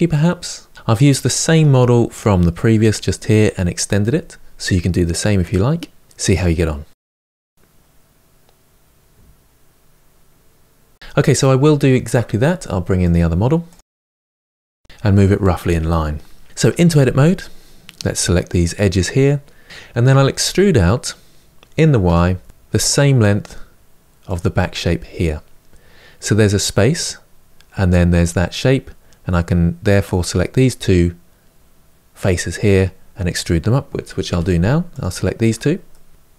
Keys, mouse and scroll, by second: 6.2-9.3 middle drag, 11.0 scroll down 7, 11.0-12.8 shift+middle drag, 12.8 click, 13.2 shift+d, 14.3 h, 14.4 click, 14.7 g, 16.3 scroll up 1, 16.5 Tab, 18.2 click, 19.7 KP_7, 20.2 e, 34.0 3, 34.7 click, 35.6-36.3 middle drag.